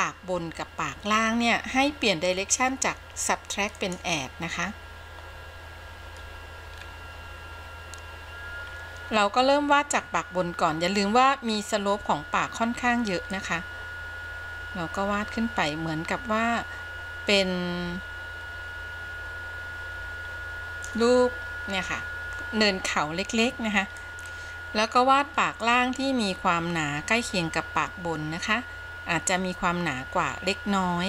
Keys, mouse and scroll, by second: 3.9 click, 6.9-9.3 scroll up 1, 9.3-9.9 scroll up 1, 9.9-11.5 scroll up 1, 11.5-11.9 scroll up 1, 13.5-21.3 drag, 24.1 ctrl+z, 25.8-31.0 drag.